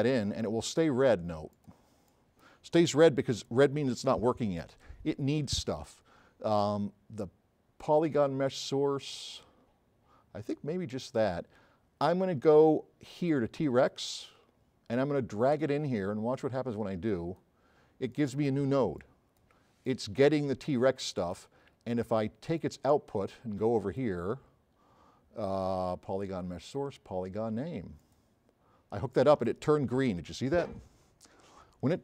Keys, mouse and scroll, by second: 15.5-17.5 drag.